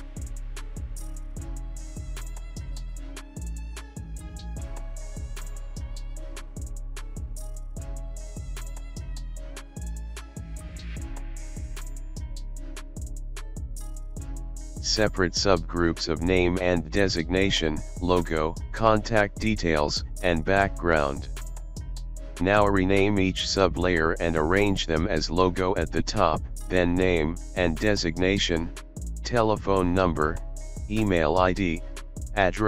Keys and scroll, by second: 0.0-1.4 typing, 2.7-4.4 typing, 6.8 Left, 6.8 Left, 6.9 Left, 7.0 Left, 7.5 BackSpace, 16.7-20.7 typing, 21.5 Return, 27.3-28.5 typing.